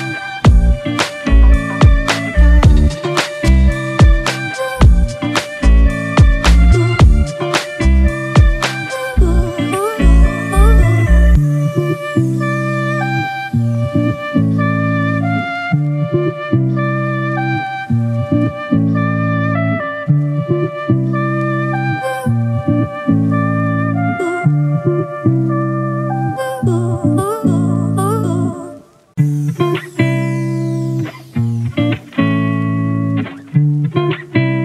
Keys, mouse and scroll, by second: 4.7 double click, 14.6-14.9 scroll down 1, 24.4 ctrl+t, 25.3 alt+shift+click, 31.6 alt+shift+click.